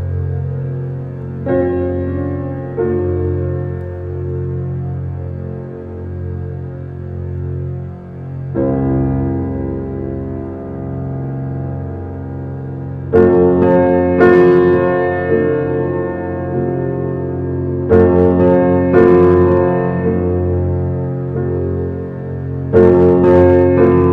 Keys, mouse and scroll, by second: 2.2 r, 3.5 shift+d, 5.9-7.6 middle drag, 7.6 shift+click, 8.1 shift+click, 8.4 shift+click, 8.8 shift+click, 9.7 s, 13.1 Tab, 13.4 Tab, 13.6 click, 13.9-15.2 middle drag, 15.2 click, 15.6 shift+click, 15.9 shift+click, 16.2 shift+click, 16.4 shift+click, 17.1 shift+d, 19.4-21.1 middle drag, 21.1 r.